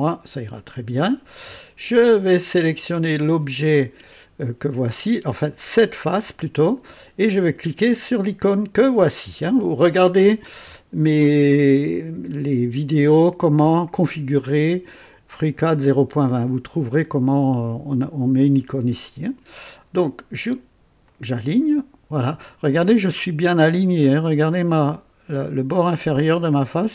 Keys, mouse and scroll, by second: 0.0 click, 2.2 click, 5.7 click, 21.0 click, 22.7-26.6 right drag.